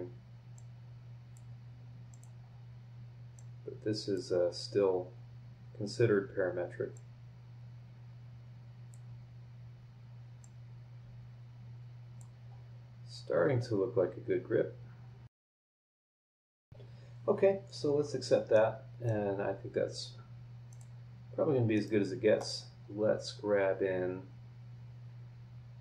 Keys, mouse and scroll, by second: 0.5-1.5 drag, 2.1 click, 2.4 scroll up 1, 3.3-4.3 drag, 4.3 scroll down 1, 5.0 scroll up 1, 6.9-9.1 drag, 10.4-12.4 drag, 12.4 scroll up 1, 12.7-13.2 scroll down 2, 15.3 click, 15.3-16.2 scroll up 10, 15.4 click, 15.5 click, 15.5 click, 15.6 click, 15.7 click, 15.8 click, 16.0 click, 16.1 click, 16.2 click, 16.2 scroll down 1, 16.4 scroll up 1, 16.5 click, 16.5 scroll down 2, 16.6 click, 17.5 scroll down 1, 17.9 scroll up 1, 18.5 middle click, 19.1 scroll down 1, 20.7 click, 21.7 middle click, 21.8 click, 21.8 right click, 22.6-23.0 scroll down 2, 23.4 scroll up 1.